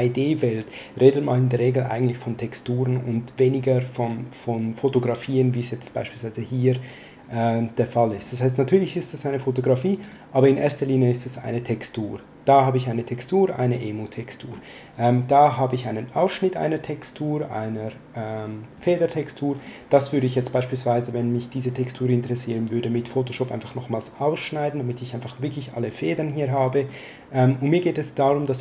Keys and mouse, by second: 10.0 click.